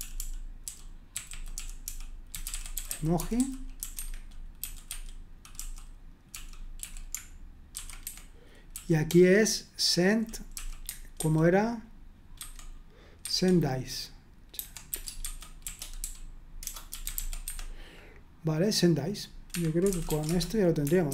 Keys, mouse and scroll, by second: 0.0-10.5 typing, 8.0 Escape, 11.1 super+1, 12.4 super+2, 13.2 super+1, 14.3-17.6 typing, 19.5 Escape, 19.7-21.1 typing.